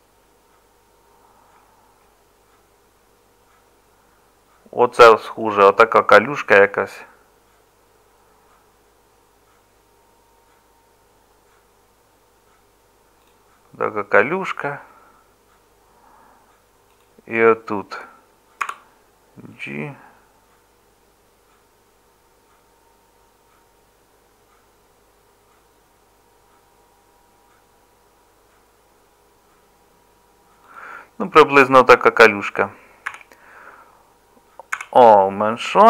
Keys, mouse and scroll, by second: 18.6 g, 33.1 a, 34.8 s.